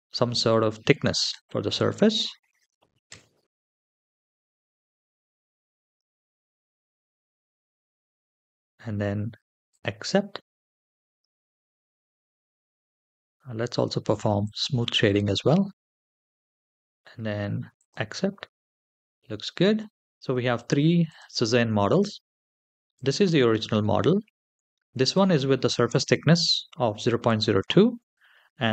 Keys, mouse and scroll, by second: 1.0-2.9 drag, 5.6 click, 6.4 scroll up 1, 6.7-8.2 middle drag, 9.6 click, 11.7 click, 12.4 ctrl+z, 15.3 click, 15.6-16.1 scroll down 1, 16.1-17.0 scroll down 5, 17.0-17.5 scroll down 1, 17.5-19.0 drag, 19.0-20.0 middle drag, 19.0-19.5 scroll down 4, 20.3 click, 20.8 click, 22.7 click, 24.8 click, 28.5 click.